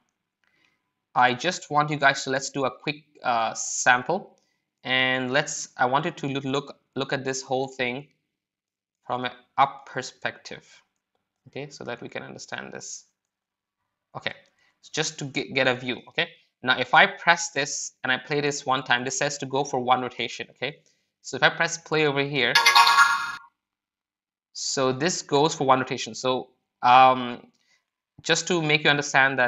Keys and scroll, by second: 23.1-23.8 typing.